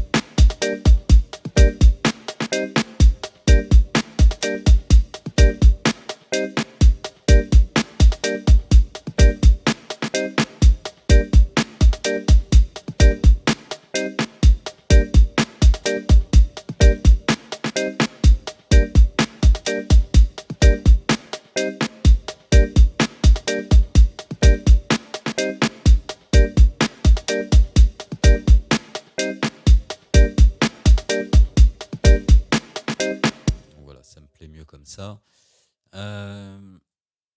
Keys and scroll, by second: 33.5 space.